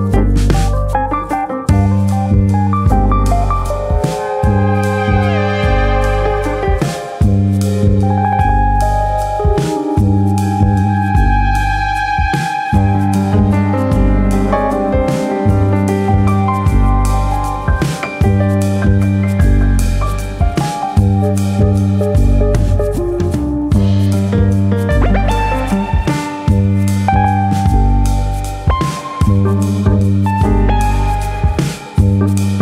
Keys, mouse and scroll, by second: 3.3 middle click, 4.6 KP_3, 5.4 s, 6.0 right click, 6.5 a, 7.0 s, 11.2 click, 12.1 e, 17.7 click, 18.4 e, 23.5 click, 24.5 alt+click, 25.3 ctrl+b.